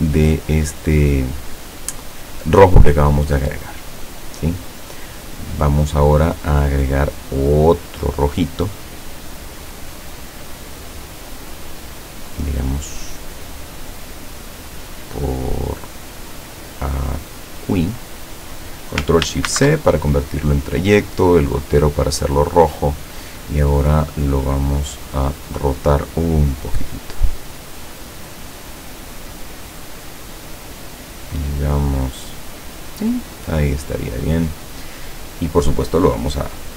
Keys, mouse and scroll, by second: 3.1-3.8 scroll down 4, 4.3 scroll down 2, 7.8 click, 11.8-17.9 drag, 19.6 ctrl+shift+c, 21.3 click, 21.8 click, 22.9 click, 25.4 click, 26.6-30.1 drag, 30.3-33.6 drag, 36.4 click.